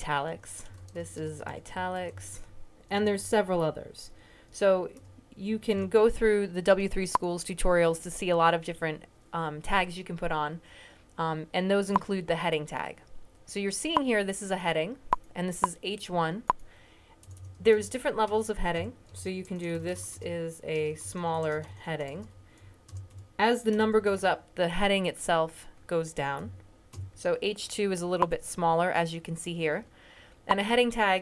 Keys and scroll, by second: 0.0-3.0 typing, 4.8-5.5 typing, 17.6-23.9 typing, 26.3 Left, 26.8 typing, 29.3 typing.